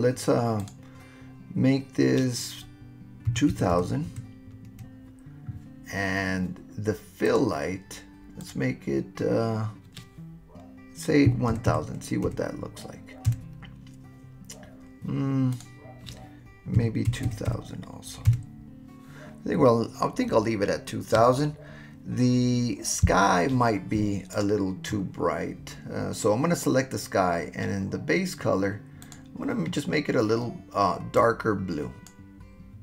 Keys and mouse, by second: 0.7-5.5 drag, 3.7 KP_0, 7.3 click, 8.5-14.1 drag, 11.7 KP_0, 15.5-19.0 drag, 17.2 KP_0, 29.0 click.